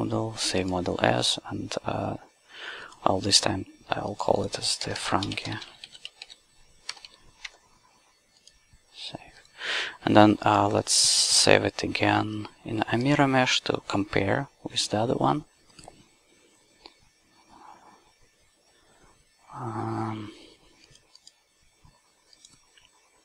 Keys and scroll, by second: 4.9-7.1 typing, 7.4 Tab.